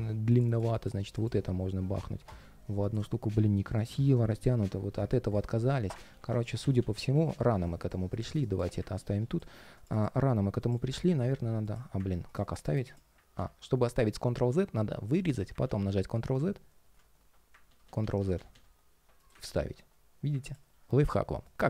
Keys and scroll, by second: 5.8 super+z, 13.1 super+x, 15.4 super+z, 17.4 super+z, 19.2 super+v.